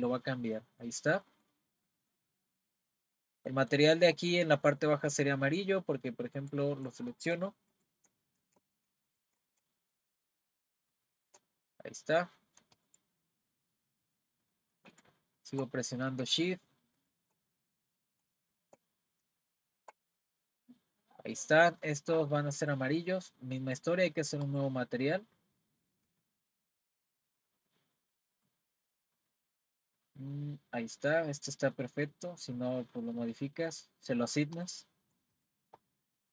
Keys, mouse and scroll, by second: 0.6-2.6 middle drag, 2.6-3.5 scroll up 4, 3.5-4.6 middle drag, 4.6-5.5 scroll down 1, 5.5-6.4 scroll down 1, 6.4 click, 7.7 shift+click, 9.1 shift+click, 10.9 shift+click, 11.6-12.8 middle drag, 12.8 shift+click, 13.2-15.4 middle drag, 15.4 shift+click, 17.0 shift+click, 17.5-18.5 middle drag, 18.5 shift+click, 19.4 shift+click, 20.1-24.4 middle drag, 24.4-27.5 drag, 28.3 click, 34.6 click, 36.2-36.3 scroll down 2.